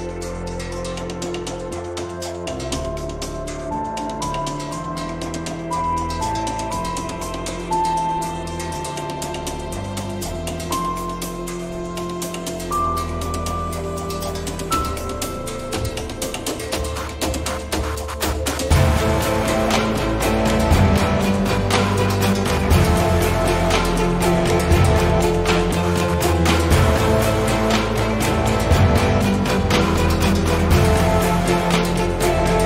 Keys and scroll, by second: 2.3 1, 2.6 Return.